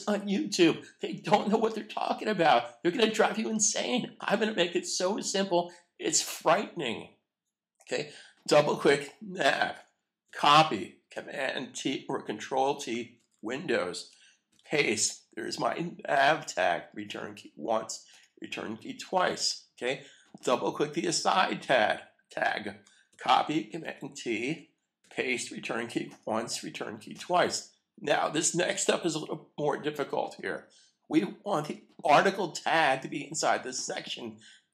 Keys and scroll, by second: 10.2 super+c, 13.1 super+t, 14.5 super+v, 17.0 Return, 23.1 super+c, 23.8 super+t, 25.0 super+v, 26.0 Return.